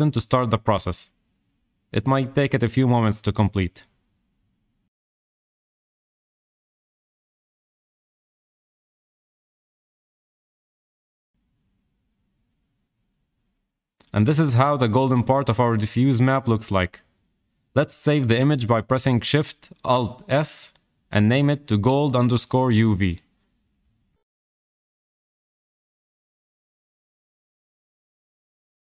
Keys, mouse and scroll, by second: 2.0 click, 18.3 alt+shift+s.